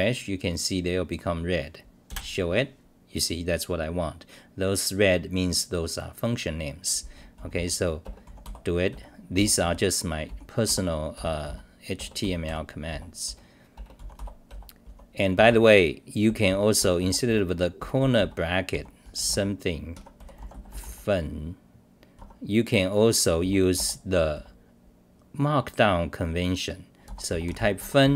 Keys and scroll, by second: 7.3 t, 8.9 r, 9.3 t, 11.1 r, 11.5 t, 12.9 r, 14.5 r, 14.9 t, 16.3-18.7 typing, 16.8 Return, 19.9 Home, 20.4 u, 22.2 Home, 23.4 t, 23.7 Return, 24.3 c, 27.0 u, 27.8 Home, 28.0 h.